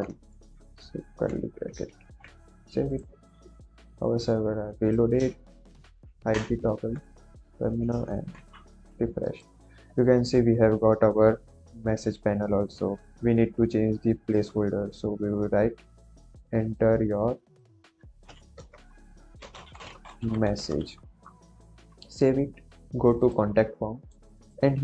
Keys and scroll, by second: 0.0 Left, 0.3 Right, 0.9 shift+], 1.8 ctrl+s, 5.9 ctrl+j, 18.2-20.7 typing.